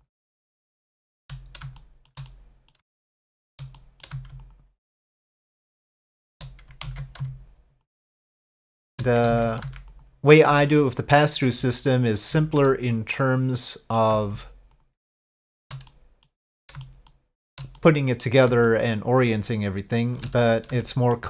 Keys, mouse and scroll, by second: 0.6 alt+shift+click, 1.8 middle click, 2.3 middle click, 2.9 shift+middle click, 3.8 middle click, 4.4 alt+shift+click, 5.7 alt+shift+click, 6.8 ctrl+z, 7.9-8.9 alt+shift+drag, 9.3 ctrl+z, 9.9 alt+shift+click, 10.7 shift+middle click, 11.8 alt+shift+click, 12.5 middle click, 12.9 click, 13.5 middle click, 14.7 alt+shift+click, 15.2 alt+shift+click, 15.9 middle click, 16.5 shift+middle click, 17.1 shift+middle click, 17.8 middle click, 18.7 shift+middle click, 19.7 alt+shift+click, 20.8 shift+middle click.